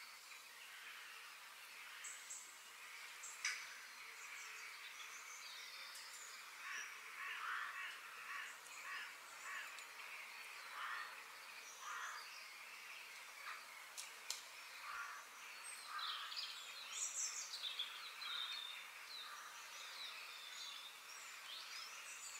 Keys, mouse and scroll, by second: 0.0 click, 1.2 f, 10.8 middle click, 12.1 middle click, 12.7-13.3 scroll up 3, 13.3-15.1 shift+middle drag, 15.1 KP_3.